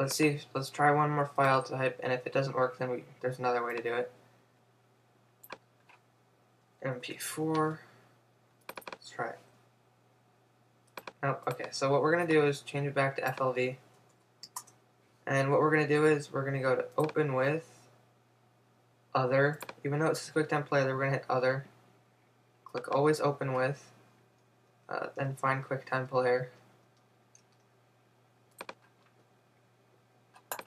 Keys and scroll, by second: 7.1 Return, 14.6 Return.